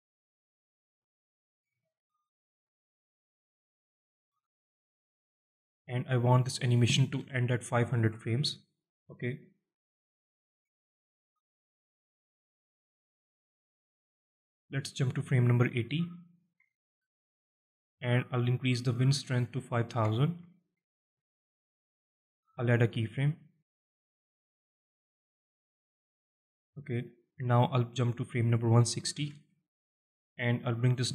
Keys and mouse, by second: 0.9-1.5 alt+middle drag, 1.6-2.1 alt+middle drag, 2.1-3.5 shift+middle drag, 3.6-4.1 alt+middle drag, 4.2-4.7 shift+middle drag, 6.0-8.6 drag, 7.5 KP_0, 10.7-11.8 drag, 13.9-14.4 drag, 15.6-17.8 drag, 18.7-21.2 drag, 20.1 KP_0, 25.8 click, 27.6 click, 28.1-29.8 drag, 30.5-31.1 drag.